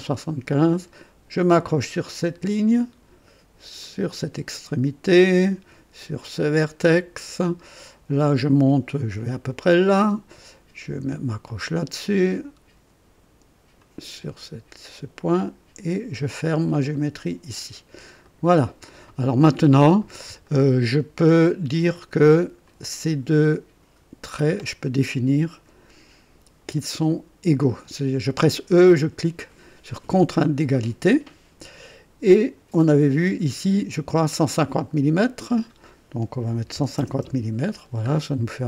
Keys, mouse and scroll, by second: 2.2 click, 3.8 click, 6.4 click, 9.8 click, 11.6 click, 13.8 click, 16.9 click, 18.2 right click, 20.4 right click, 22.6 click, 24.3 click, 30.0 e, 33.2 click, 35.3 click, 36.5-37.2 typing, 37.2 KP_Enter.